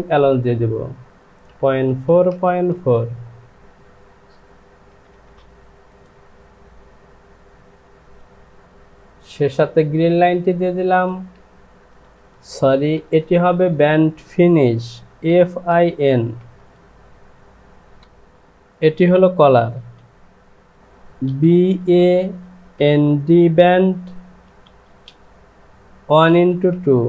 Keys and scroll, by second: 1.4 KP_Decimal, 1.8 KP_4, 2.0 Down, 4.9 Down, 5.1 Down, 5.3 Down, 12.3 KP_2, 13.0 BackSpace, 15.1 f, 15.5 i, 16.4 n, 18.0 j, 18.1 Home, 19.7 e, 21.8 a, 22.7 n, 24.4 d, 24.9 space, 25.9 KP_1, 26.2 x.